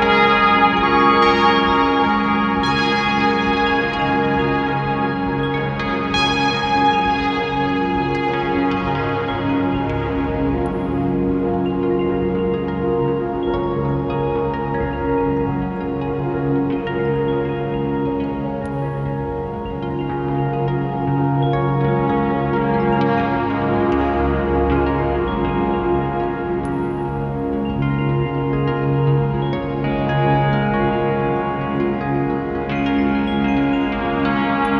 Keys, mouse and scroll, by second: 1.0-1.6 scroll down 1, 1.6 alt+a, 3.4-9.0 drag, 5.0 scroll up 1, 9.6 scroll down 1, 9.9 scroll up 1, 10.5 click, 11.7 ctrl+t, 12.1 click, 12.7-34.1 drag, 20.3 scroll down 1, 20.6 scroll up 1, 22.8 scroll down 1, 24.2 ctrl+z, 25.8 ctrl+z, 26.8 ctrl+z, 28.6-29.0 scroll down 1, 29.0 scroll up 1, 29.2 `, 32.4-32.7 scroll down 1.